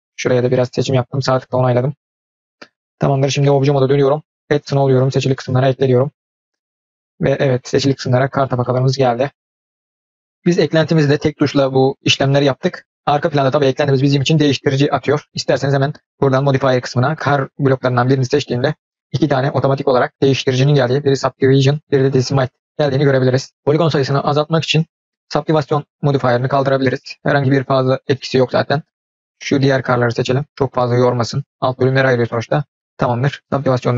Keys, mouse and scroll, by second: 1.3-3.1 middle drag, 3.4 Tab, 5.2-6.6 drag, 8.3 click, 8.5-10.3 middle drag, 12.6-12.9 middle drag, 13.8 click, 16.1 click, 26.6 click, 27.7-28.4 scroll up 2, 28.4 scroll down 1, 30.5 click, 31.5 click, 32.7-33.4 middle drag.